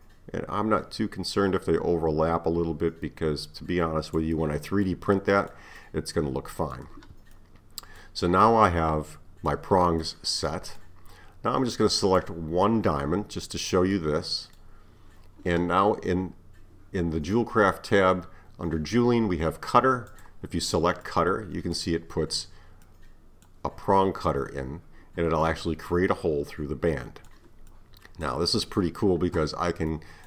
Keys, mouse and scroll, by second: 4.9-12.0 middle drag, 12.0 click, 13.2-14.0 scroll up 4, 14.0-17.0 middle drag, 20.1-21.1 drag, 21.1-30.2 middle drag.